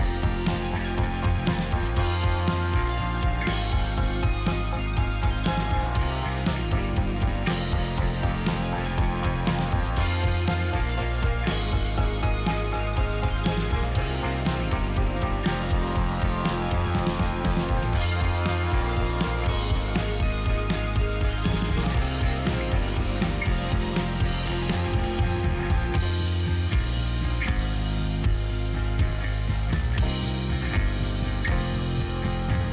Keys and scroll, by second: 0.8 2, 1.6 space, 4.3 z, 5.0 space, 6.0 ctrl+z, 8.9 space, 9.9 q, 10.5 space, 11.8 space, 12.3 space, 13.0 space, 14.2 Delete, 14.3 space, 17.8 z, 19.4 x, 21.1 space, 24.3 z, 25.6 space, 26.2 space, 27.0 Delete, 27.2 space, 27.9 space, 29.4 space, 31.6 space.